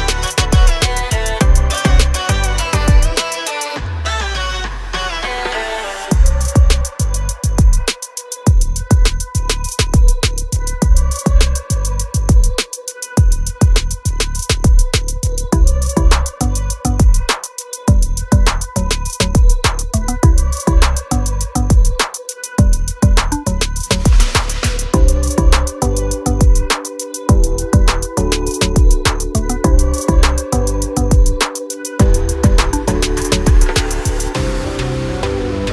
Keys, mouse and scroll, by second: 0.5 click, 0.7 double click, 1.4 double click, 1.9 click, 2.3 double click, 4.7 click, 5.8 click, 7.0 shift+click, 7.8 right click, 9.7 click, 10.4 click, 12.0 click, 12.8 click, 13.9 scroll down 1, 14.1-14.6 scroll up 1, 14.6 click, 15.2 click, 16.4 scroll down 1, 16.7 click, 17.5 click, 18.2 click, 18.7 scroll up 1, 19.1 scroll down 1, 19.7 scroll up 1, 19.9 click, 20.2 double click, 21.4 right click, 21.5 click, 22.6 scroll down 1, 22.8 scroll up 1, 24.5 click, 25.1 click, 26.9 scroll, 27.0 scroll up 1, 27.2 scroll down 1, 27.7 click, 28.5 click, 29.9 Delete, 30.7 scroll up 1, 31.5 click, 32.2 scroll down 1, 34.0 click, 34.7 scroll down 1, 35.0-35.4 scroll up 1.